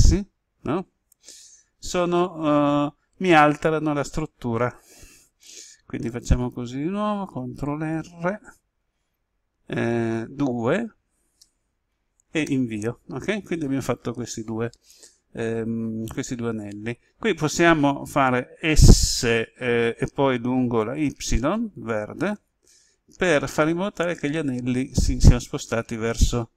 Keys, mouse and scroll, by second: 1.1 right click, 4.9 ctrl+z, 8.4 ctrl+r, 11.3 2, 12.4 Return, 15.4 right click, 21.1 s.